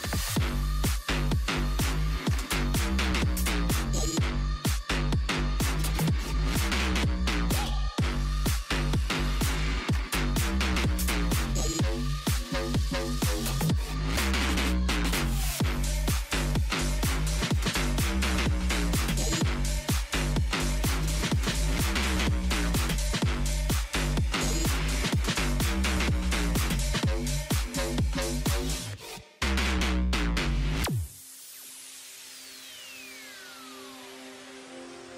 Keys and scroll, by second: 2.7 shift+h, 3.6 shift+i, 3.9 shift+p, 5.0-6.5 typing, 21.1 6, 21.8 5, 22.2 0, 25.3 2, 25.6 0.